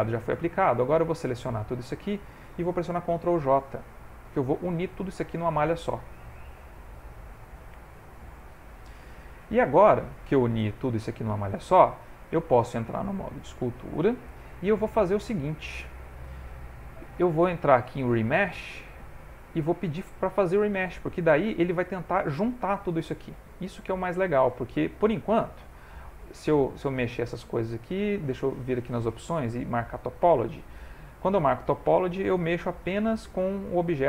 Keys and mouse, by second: 0.2 middle click, 0.9 click, 4.9 ctrl+j, 6.1 middle click, 12.6 ctrl+Tab, 14.7 ctrl+middle click, 16.5 middle click, 18.6 click, 23.2 middle click, 23.3 ctrl+middle click, 23.8 ctrl+middle click, 24.1 middle click, 26.2 click, 28.6 click, 31.1 click.